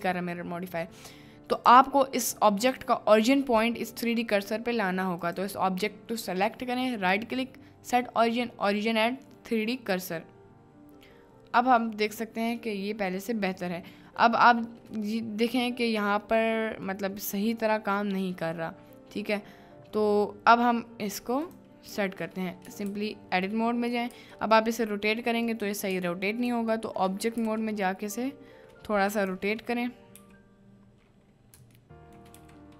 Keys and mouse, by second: 2.6 click, 5.2 click, 6.5 middle click, 6.9-10.3 drag, 12.0 middle click, 12.8-14.2 middle drag, 15.2-15.6 middle drag, 16.5-16.9 middle drag, 18.4 middle click, 22.6 Tab, 22.8 a, 24.1 r, 26.0 Tab, 26.8 shift+middle click, 27.4 r, 29.2 click, 30.2 t, 32.5 t.